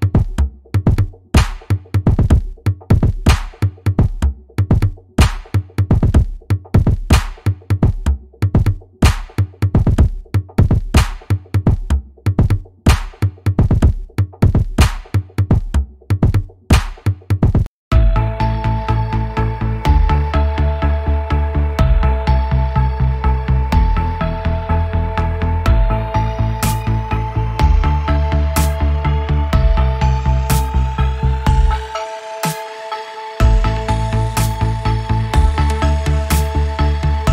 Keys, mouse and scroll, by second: 2.2 click, 3.6 click, 5.1 alt+click, 5.5 click, 6.4 click, 7.9-9.8 drag, 9.8 scroll up 1, 11.0 click, 11.3 scroll up 1, 12.0 click, 13.2 scroll up 1, 14.7 click, 16.0 scroll up 1, 16.6 click, 17.6 click, 17.9 scroll up 1, 18.3-18.8 scroll down 1, 19.6 click, 21.5 alt+scroll up 1, 22.0-25.4 drag, 27.6 click, 28.2-36.3 drag.